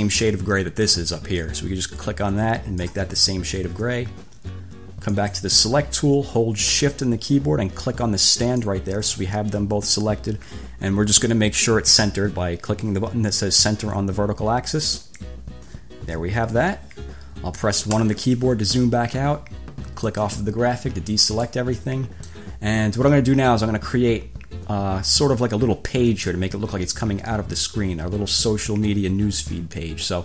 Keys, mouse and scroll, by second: 1.6-3.2 drag, 5.3 click, 8.7 shift+click, 15.2 click, 18.2 1, 20.3 click, 21.7-22.8 drag.